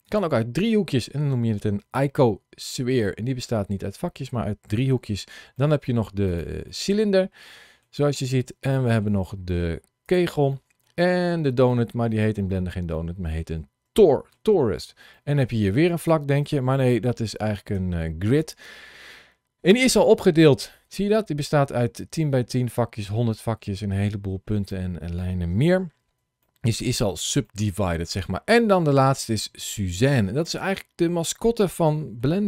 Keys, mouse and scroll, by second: 4.8 shift+middle click, 5.4 shift+middle click, 6.1 click, 8.2 shift+middle click, 8.6 shift+middle click, 9.9 click, 10.4 shift+middle click, 11.5 shift+middle click, 12.8 middle click, 13.8 shift+middle click, 14.5 scroll down 2, 15.0 shift+middle click, 15.8 click, 17.6 Tab, 25.2 Tab, 25.7-26.1 scroll down 2, 26.3 shift+middle click, 27.3 middle click.